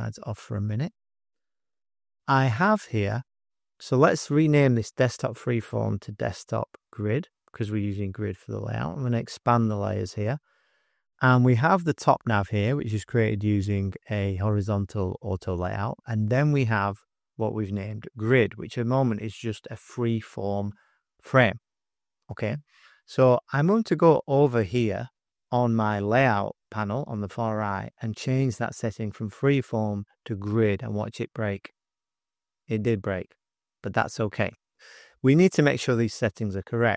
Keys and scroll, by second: 0.2 super+=, 0.8 space, 1.3 space, 1.8 space, 6.0-8.0 typing, 23.5 typing.